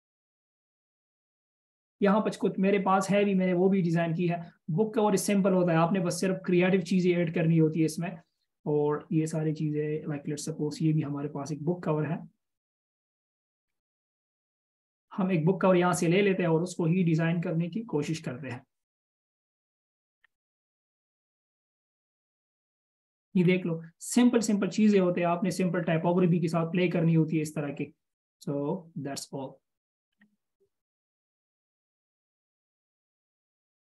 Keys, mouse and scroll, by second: 1.7 Return, 3.8 scroll down 1, 7.8-9.6 scroll down 1, 13.9-14.8 scroll up 1, 18.9 scroll down 1, 23.8 scroll up 1, 25.1-26.3 scroll down 1, 26.3 scroll up 1, 30.4-31.7 scroll down 1, 31.7 scroll down 1.